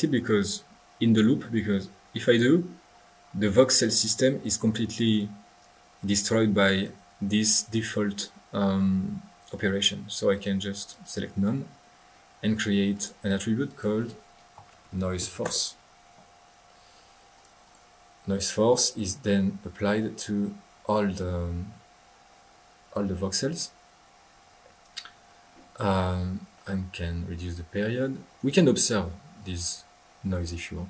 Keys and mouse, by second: 1.7-2.5 drag, 2.7 middle click, 2.7 click, 3.1 middle click, 3.3 middle click, 5.0 click, 5.7 middle click, 6.7-7.1 drag, 10.3 click, 10.9 click, 12.9 click, 13.6 click, 14.1 click, 16.3 middle click, 17.3 click, 17.6 click, 18.1 middle click, 18.2 click, 23.4-24.8 middle drag, 28.3-28.7 middle drag, 29.4 click.